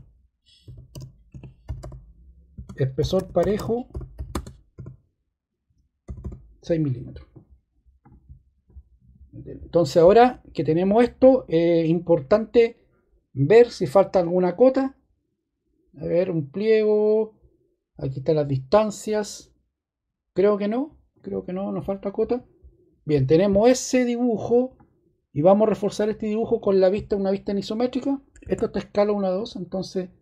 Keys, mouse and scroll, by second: 0.0-4.7 typing, 6.0 typing, 28.4 ↺.